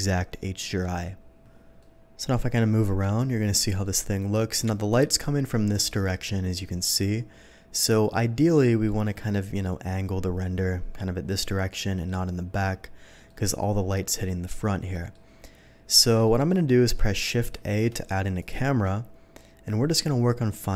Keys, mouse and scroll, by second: 1.7-3.1 middle drag, 3.8 middle click, 6.9-8.1 middle drag, 8.5 middle click, 9.3 middle click, 11.2-12.0 middle drag, 13.2-13.8 middle drag, 14.9 middle click, 16.1 alt+a, 16.2 middle click, 16.8 middle click, 17.5 shift+a, 18.3 click, 19.8-20.7 middle drag.